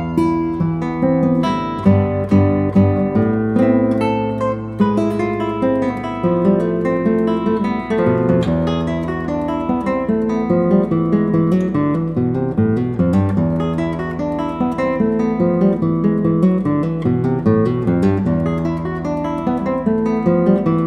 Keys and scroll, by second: 1.4 x, 4.8 x, 6.7 d.